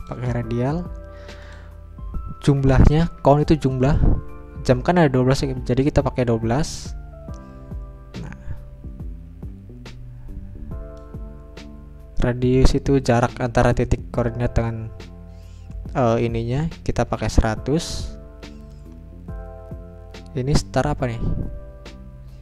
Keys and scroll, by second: 3.2 BackSpace, 5.5-6.2 typing.